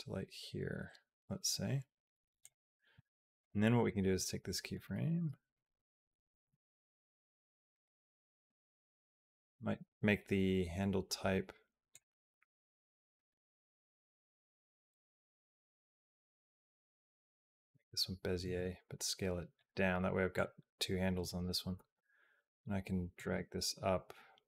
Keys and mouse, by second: 3.2 click, 3.6-4.6 drag, 5.3 click, 6.3 r, 8.2-14.8 right drag, 15.8 click, 16.1-17.3 right drag, 18.2 s, 20.2-21.2 drag, 21.6 g, 23.1 r.